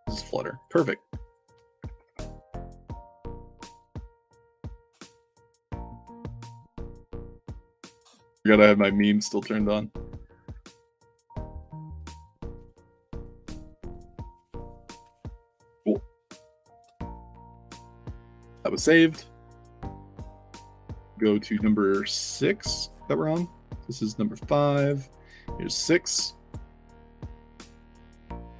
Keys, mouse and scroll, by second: 1.2 click, 1.8 f, 2.9 click, 4.1 click, 5.1 ctrl+v, 6.8 click, 7.3 alt+Tab, 11.9 alt+click, 13.2 click, 16.4 middle click, 16.9 alt+drag, 17.3 d, 17.9 w, 20.3 click, 20.9 click, 22.0 middle click, 22.0-22.4 scroll down 4, 22.3 middle click, 23.1 middle drag, 24.7 click, 25.7 click, 26.1 ctrl+c, 26.4 drag, 27.0 click, 27.2 click, 28.4 click.